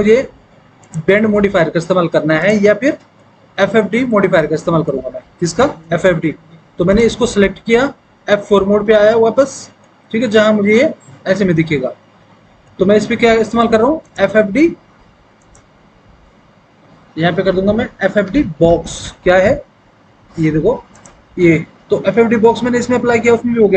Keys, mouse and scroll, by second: 8.4 F4, 8.8 F3, 11.0 F4, 18.1 f.